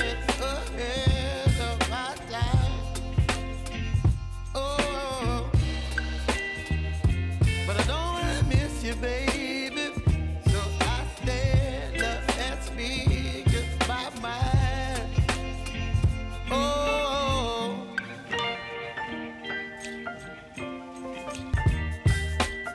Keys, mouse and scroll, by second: 1.8 click, 4.2 click, 4.6-5.6 typing, 6.6 click, 8.0 ctrl+shift+c, 8.5-11.8 typing, 12.9-22.7 drag.